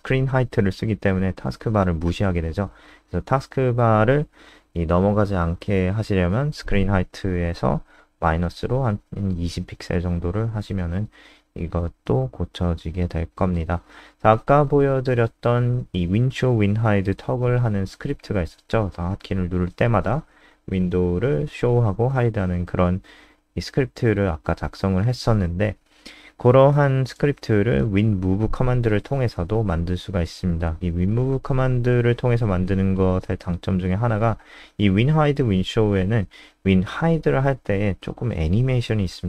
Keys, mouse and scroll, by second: 2.3 alt+F4, 2.5 click, 2.7 alt+F4, 2.9 click, 5.0 click, 5.8-6.2 scroll down 2, 8.1-8.9 scroll down 2, 8.9 click, 9.9 ctrl+z, 10.1 ctrl+z, 11.0 click, 11.6 ctrl+z, 11.7 ctrl+z, 12.5 ctrl+z, 13.0 ctrl+z, 13.2 ctrl+z, 13.8 ctrl+z, 14.6 ctrl+z, 14.7-15.8 ctrl+z, 16.5 ctrl+z, 18.0-18.9 ctrl+z, 19.6-20.7 ctrl+z, 21.2-23.0 ctrl+z, 23.7-24.7 ctrl+z, 25.3 ctrl+z, 25.5-27.6 ctrl+z, 28.4-29.6 ctrl+z, 30.6-31.3 scroll up 6, 30.9 click, 31.3 ctrl+s, 32.1 ctrl+Home, 34.4 click, 36.8 ctrl+s, 37.2 F5, 37.9 F3.